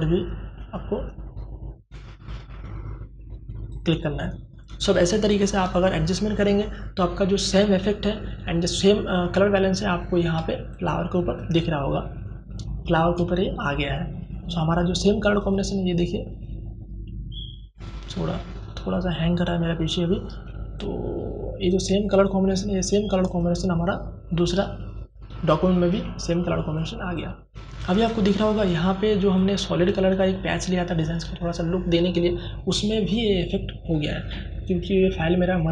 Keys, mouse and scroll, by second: 2.6 alt+click, 9.4 space, 9.6-14.3 ctrl+drag, 19.4 space, 19.6-22.1 ctrl+drag, 23.6 space, 24.0-35.7 ctrl+drag.